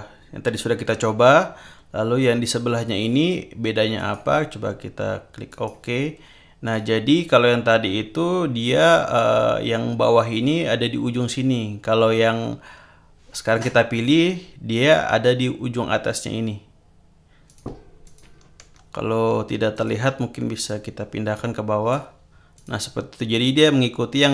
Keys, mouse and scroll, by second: 4.0 click, 5.5 click, 6.6 click, 17.5 click, 18.0 click, 19.7 shift+click, 20.6-22.1 drag, 22.5 click.